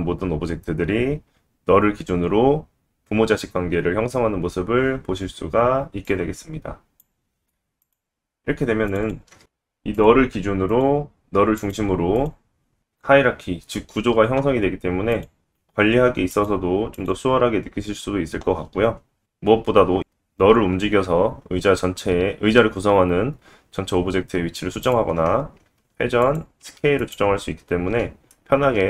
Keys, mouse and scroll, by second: 6.0-7.0 drag, 7.8 click, 8.9 click, 9.0-17.2 drag, 11.3 l, 17.2-17.8 middle drag, 17.8 click, 18.0 middle click, 18.7 click, 18.8 scroll down 2, 18.8-26.6 middle drag, 19.3 g, 20.2-20.6 scroll down 2, 20.6 g, 25.8 r, 26.6 s, 27.5 ctrl+z, 28.3 middle click.